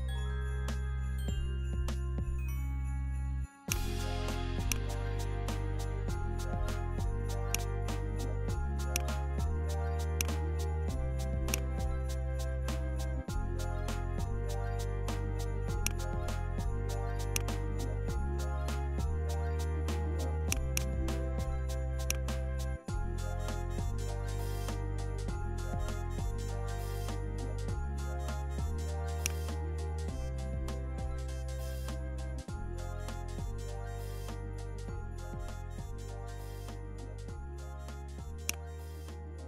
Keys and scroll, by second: 0.4 BackSpace, 26.1 Up, 26.5 Up, 26.7 Up, 27.0 Up, 27.4 Down, 28.1 Left.